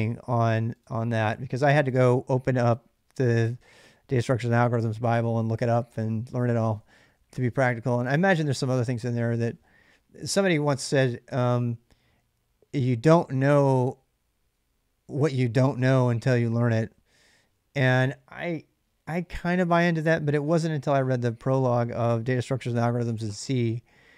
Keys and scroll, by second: 6.5 ctrl+[, 6.6 ctrl+j, 7.3 j.